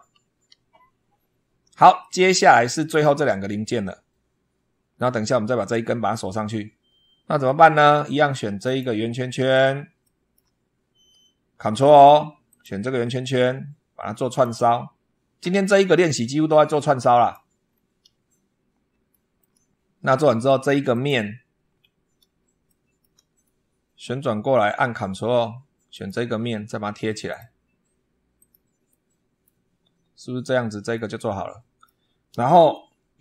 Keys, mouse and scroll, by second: 0.0 super+2, 1.8 click, 2.6-3.0 scroll down 2, 7.2-7.7 scroll up 2, 8.5 click, 9.0-9.4 scroll down 2, 9.9 shift+middle click, 10.4 shift+scroll up 2, 12.3 ctrl+click, 14.1 click, 17.0 click, 17.5 scroll down 1, 17.8 scroll up 1, 18.9-19.4 shift+middle drag, 20.8 click, 21.5-21.8 scroll down 2, 22.5 shift+middle click, 23.3-24.6 shift+middle drag, 25.8 ctrl+click, 27.1 click, 28.2 click, 28.7 middle click, 29.6-29.9 scroll up 2, 30.8-31.9 middle drag, 32.6-33.2 shift+middle drag.